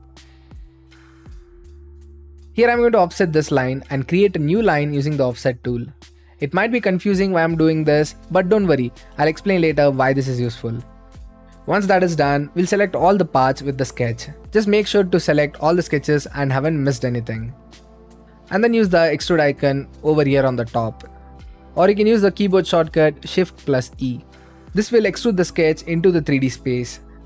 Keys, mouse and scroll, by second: 0.8-1.9 middle drag, 3.6-4.6 drag, 5.9-9.9 drag, 11.6-12.8 middle drag, 13.1-14.2 middle drag, 14.2-15.0 scroll up 2, 15.4-16.9 scroll up 2, 17.4 shift+middle click, 19.2-20.3 drag, 21.9-24.4 right drag, 24.8-27.2 drag.